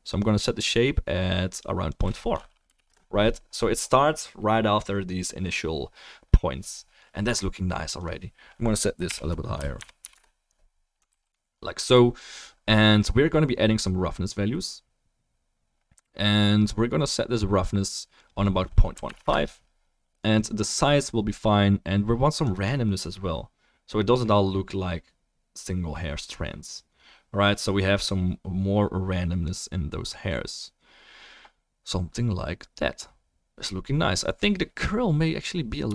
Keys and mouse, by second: 11.1 ctrl+s.